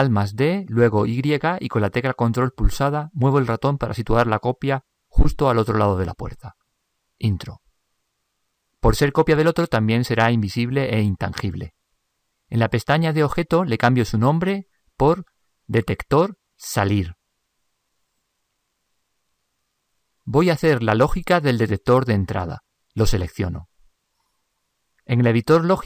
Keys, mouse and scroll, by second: 0.5 alt+d, 8.1-12.8 middle drag, 23.4-25.2 right drag.